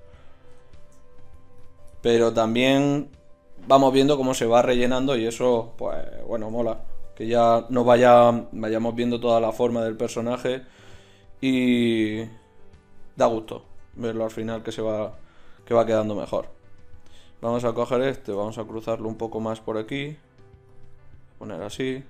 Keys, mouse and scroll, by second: 0.7 middle click, 2.7 middle click, 5.2 click, 17.5 middle click, 20.0 ctrl+z.